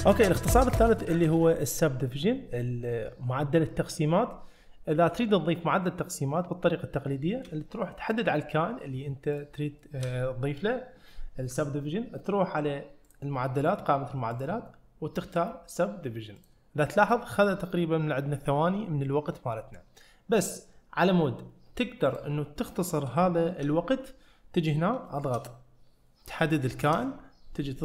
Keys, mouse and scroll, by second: 7.2 shift+middle click, 8.1 click, 9.4-9.8 drag, 9.8 shift+middle click, 13.1-16.5 drag, 19.1 click, 19.1 middle click, 22.1 click, 23.2-23.7 shift+drag, 23.2 shift+middle click, 25.1 shift+middle click, 26.6 shift+middle click.